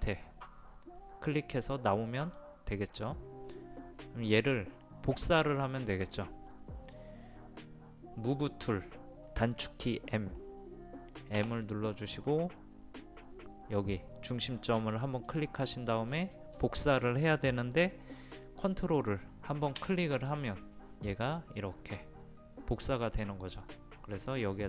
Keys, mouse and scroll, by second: 2.0 middle click, 4.3 click, 5.5-6.6 middle drag, 11.4 m, 15.1 click.